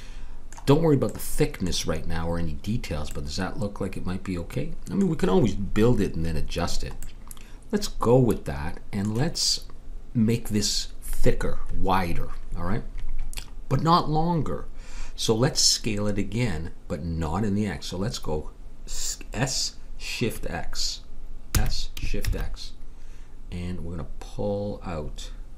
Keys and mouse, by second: 1.0-3.9 middle drag, 21.5 s.